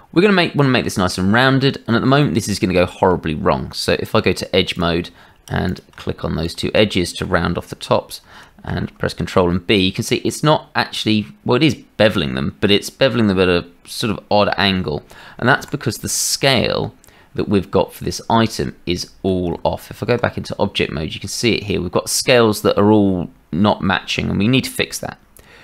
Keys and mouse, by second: 2.2 click, 3.1 Tab, 5.0 shift+middle click, 5.6 click, 6.8 click, 8.6 ctrl+b, 19.5 Tab.